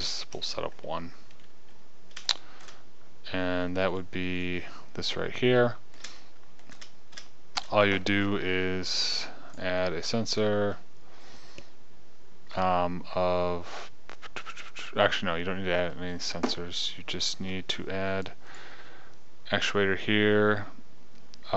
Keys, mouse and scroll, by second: 1.0 KP_0, 15.2-19.0 drag.